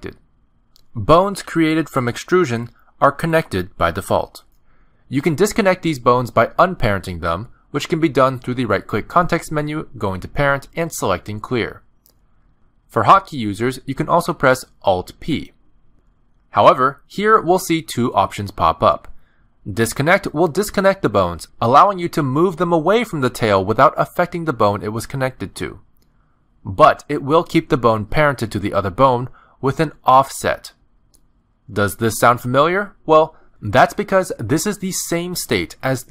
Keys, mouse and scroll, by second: 0.2 click, 0.6 shift+middle click, 0.8 middle click, 1.2 e, 3.7 middle click, 4.6 click, 5.0 g, 6.2 middle click, 6.7 shift+middle click, 7.1 middle click, 8.5 click, 10.0 right click, 15.1 alt+p, 22.0 middle click, 22.7 g, 23.9 middle click, 24.7 g, 25.4 middle click, 25.7 Tab, 26.9 click, 27.2 middle click, 27.5 r, 29.3 click, 29.7 r, 31.4 middle click, 32.2 click, 32.6 middle click, 33.4 click, 33.8 r.